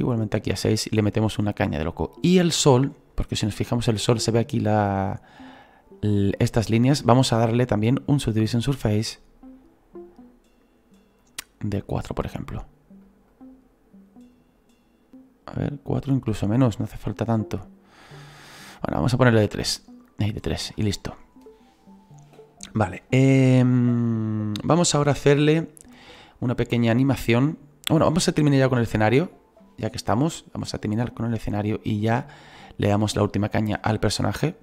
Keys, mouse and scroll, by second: 0.7 click, 3.2 scroll up 1, 9.7-20.9 drag, 20.9-21.5 scroll down 1, 21.5-23.2 scroll down 1, 23.2 click, 24.9-30.2 drag, 26.7 scroll down 2, 30.2-33.0 middle drag, 33.0-34.6 drag, 34.0 scroll down 1.